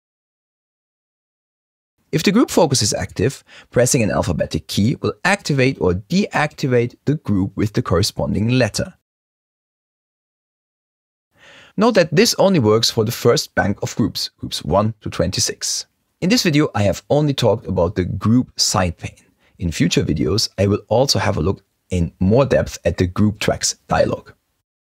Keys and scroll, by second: 6.0-10.2 typing.